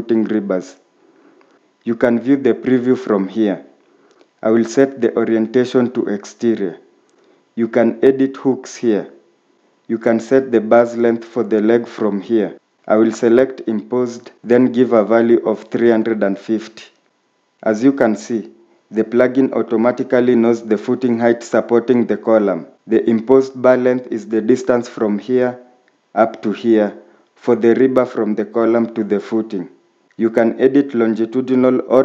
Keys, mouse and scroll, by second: 14.5-16.1 typing, 19.9-20.6 typing.